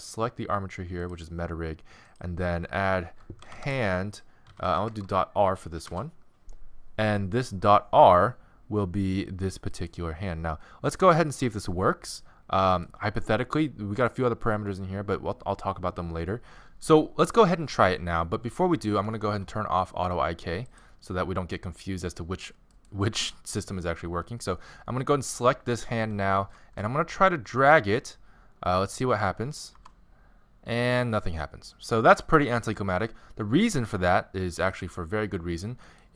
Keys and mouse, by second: 9.8-11.5 right drag, 11.5-14.6 middle drag, 14.6 right click, 20.7-22.6 drag, 22.8-24.6 right drag, 26.6-29.6 middle drag, 29.7 g, 35.9-36.1 drag.